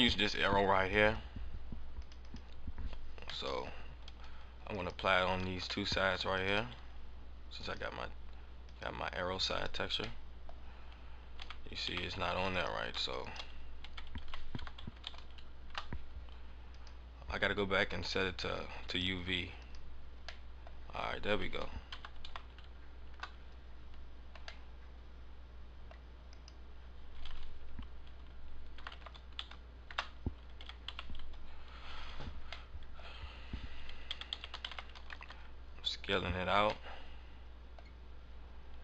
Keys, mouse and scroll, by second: 2.4 click, 2.6 click, 3.1 scroll down 1, 3.4 middle click, 4.7 right click, 5.6 scroll up 1, 5.8 middle click, 6.3 shift+right click, 7.6 click, 8.3 click, 8.7 click, 9.4 click, 10.1 middle click, 11.3 a, 11.8 a, 12.5 right click, 13.1 shift+right click, 14.2 a, 14.5 r, 16.7 click, 16.9 click, 17.4-18.3 scroll down 7, 18.8 click, 20.0 click, 20.4 middle click, 20.5 scroll up 1, 21.8 r, 24.5 middle click, 26.2 right click, 28.7 r, 30.5 a, 32.6 middle click, 32.8 middle click, 34.0 a, 34.2 a, 34.4 s, 36.3 scroll down 4, 36.8 middle click.